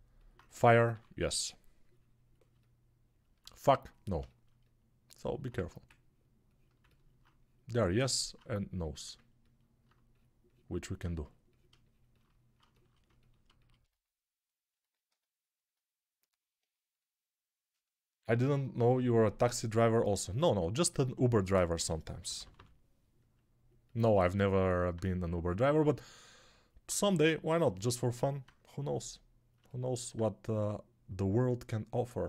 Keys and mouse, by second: 0.8 3, 5.4 1, 21.6 g, 22.1 ], 22.3 ], 22.4 ].